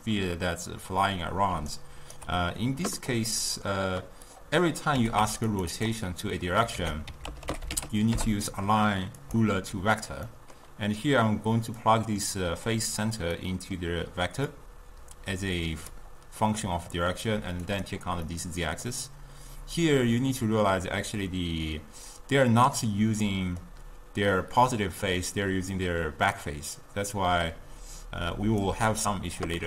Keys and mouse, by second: 1.8 right click, 2.2 d, 2.4 d, 3.3-4.4 middle drag, 4.4 click, 5.0 g, 5.8 click, 6.9 ctrl+a, 10.4-11.9 middle drag, 11.9-13.4 drag, 13.4-14.6 middle drag, 14.6-16.5 drag, 16.5-17.8 middle drag, 17.8 click, 18.3-19.8 middle drag, 19.8-22.9 drag, 23.3-26.4 middle drag, 26.5-29.5 drag.